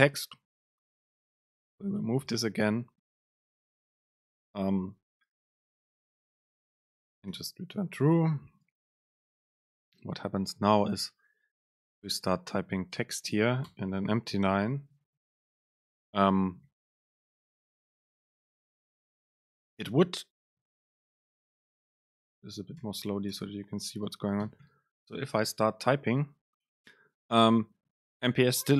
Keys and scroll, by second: 2.7 alt+Up, 3.1 Down, 3.6 Up, 4.2 End, 4.6 shift+Left, 5.5 shift+Right, 6.0 BackSpace, 9.3 ctrl+shift+super+F9, 12.4 BackSpace, 13.8 Return, 17.2 BackSpace, 21.0 Right, 21.5 super+Right, 21.8 BackSpace, 23.4 Return.